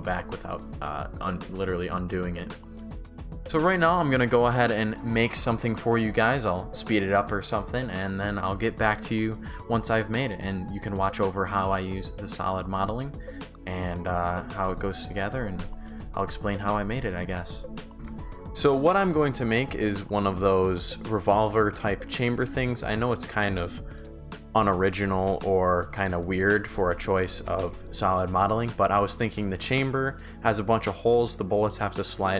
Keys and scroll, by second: 0.1 ctrl+z, 1.1 shift+w, 3.2 Pause, 17.9 alt+Tab, 18.0 Pause, 19.6 shift+w, 22.5 shift+w, 24.0 Delete, 27.2 shift+w, 27.6 shift+s.